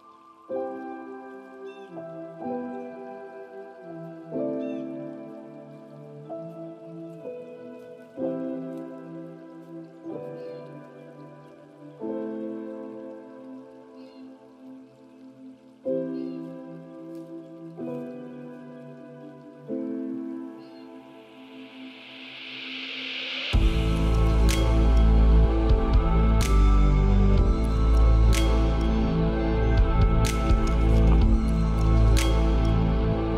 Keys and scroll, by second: 4.2 ctrl+space, 17.5 ctrl+space.